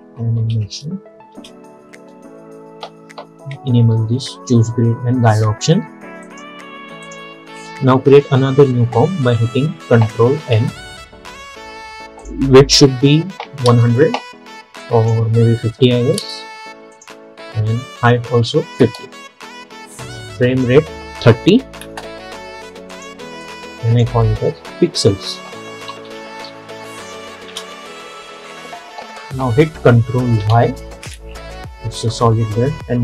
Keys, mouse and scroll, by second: 0.0-1.1 typing, 1.4 Return, 6.3 click, 10.5 ctrl+n, 12.3 click, 14.9 click, 20.3-25.4 drag, 25.2-27.0 typing, 27.6 Return, 30.5 ctrl+y.